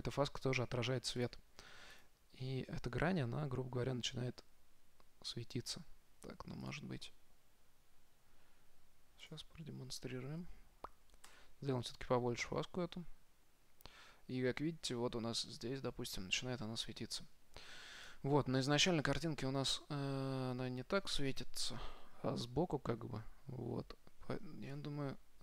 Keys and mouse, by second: 1.5-3.6 drag, 5.1-7.1 middle drag, 7.8-8.9 drag, 10.2-11.5 drag, 18.6 z, 18.7 z, 19.1-22.7 middle drag, 25.0 KP_7.